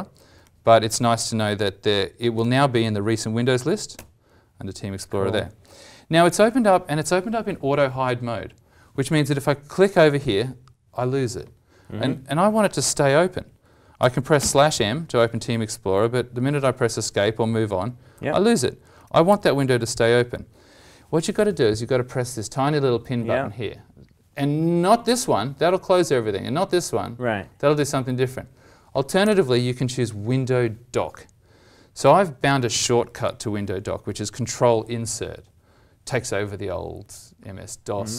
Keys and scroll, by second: 13.9 ctrl+\, 14.3 ctrl+m, 18.9 ctrl+\, 19.2 ctrl+m.